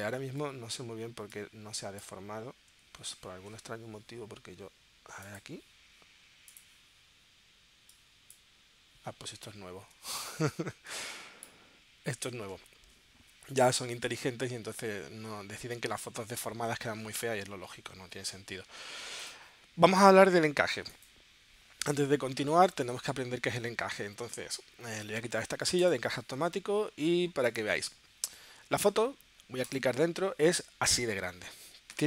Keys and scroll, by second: 0.2 super+z, 3.3 super+z, 10.0 super+z, 12.5 super+z.